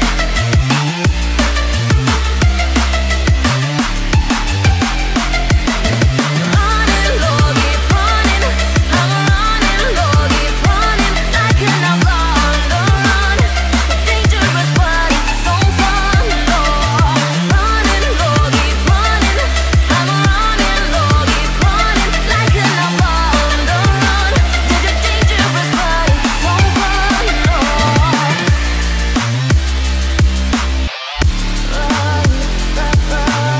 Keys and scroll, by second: 12.8 ctrl+0, 18.4 ctrl+g, 19.2 ctrl+alt+shift+e, 25.4 Escape.